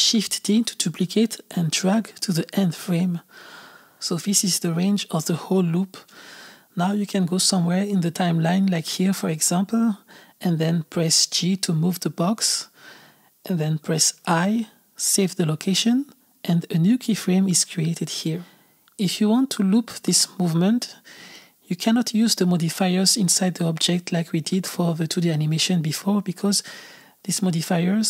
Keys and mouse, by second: 1.3 shift+d, 6.0-9.2 drag, 10.2 Left, 10.7 g, 18.0-21.2 drag, 21.2 shift+d, 23.7 click.